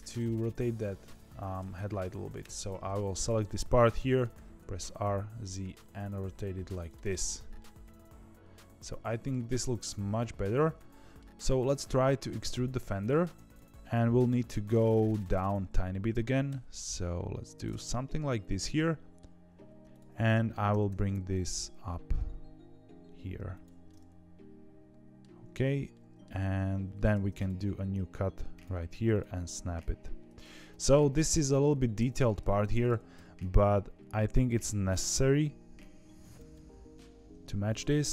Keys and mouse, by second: 2.3 ctrl+KP_Add, 3.4 middle click, 4.3 r, 7.0 middle click, 7.5-11.1 middle drag, 12.9 click, 13.6 KP_3, 16.4 e, 17.7-19.1 middle drag, 19.8 ctrl+z, 19.8 click, 20.2 middle click, 20.6 g, 23.8-25.1 middle drag, 25.8 middle click, 27.1 ctrl+r, 29.0 click, 29.5 g, 30.7 click, 31.0 g, 33.1 KP_3, 34.2 2, 34.4 click, 34.6 g, 36.4 middle click, 37.1 1, 37.5 2.